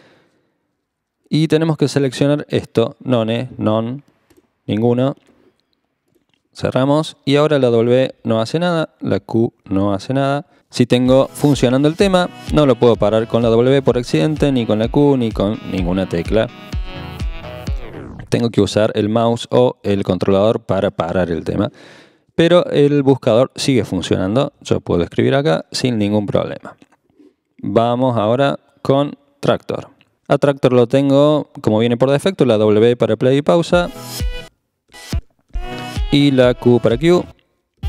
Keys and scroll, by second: 7.7-9.6 typing, 13.0 typing, 14.2-16.9 typing, 24.2-25.1 typing, 33.7 typing, 34.9-35.5 typing, 37.0-37.8 typing.